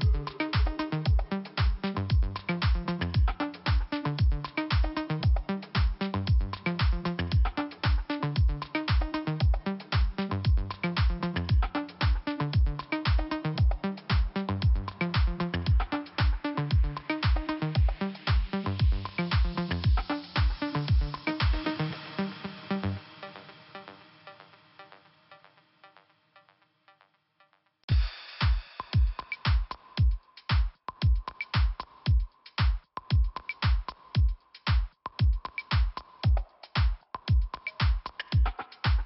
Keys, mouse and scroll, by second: 0.9 click, 2.2 scroll down 1, 2.7 scroll up 1, 4.5 click, 4.6 click, 7.1 right click, 7.2 right click, 8.1 click, 10.6 click, 11.5 click, 11.6 click, 12.7 click, 12.9 click, 14.7 scroll down 2, 18.1 click, 21.8 click, 26.3 click, 28.8 scroll up 1, 30.1 click, 30.2 click, 31.7 click, 31.8 click, 32.7 click, 32.7 click, 35.9 click, 38.1 click.